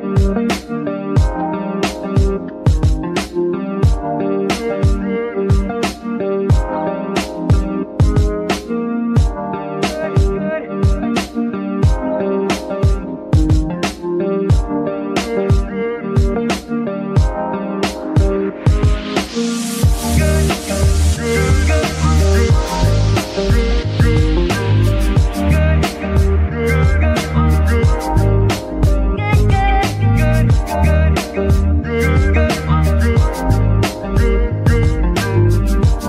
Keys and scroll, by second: 0.0-0.7 typing, 0.1 Left, 0.3 Left, 2.3 3, 3.5 F2, 4.3-5.7 typing, 5.8 Return, 8.3 F2, 8.8-10.1 typing, 9.7 Left, 9.8 Left, 13.7 Right, 14.1 BackSpace, 14.2 BackSpace, 14.4 BackSpace, 14.5 BackSpace, 14.9 Left, 15.1 Left, 15.5 BackSpace, 16.4 Return, 20.1 g, 20.7 Escape, 23.5 ctrl+c, 24.9 g, 25.6 Escape, 28.2 ctrl+v, 29.5 g, 30.6 Escape, 33.9 ctrl+c, 35.3 g, 35.9 Escape.